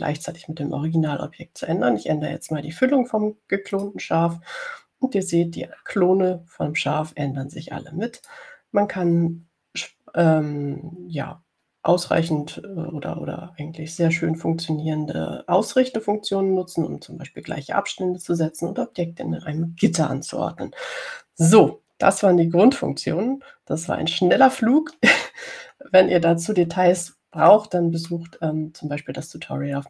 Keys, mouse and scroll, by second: 5.0 click, 9.5 click, 13.5 click, 23.9-24.6 ctrl+scroll down 4, 25.6 ctrl+scroll down 2, 27.3-27.7 scroll up 2, 28.7-29.7 drag.